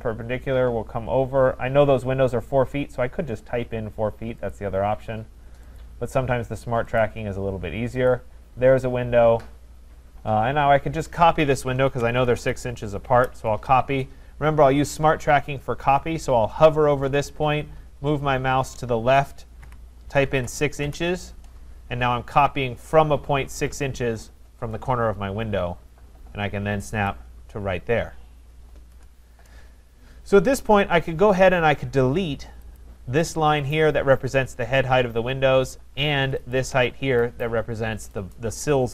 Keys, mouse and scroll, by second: 4.5 click, 5.8 click, 8.0 click, 8.1 click, 11.8-13.1 typing, 14.2-15.0 scroll up 8, 19.6 6, 20.3 shift+', 20.8 Return, 27.1 click, 27.8-28.3 scroll, 28.9 Return, 30.5 click, 32.8 click, 33.3-33.6 scroll, 36.5 shift+click.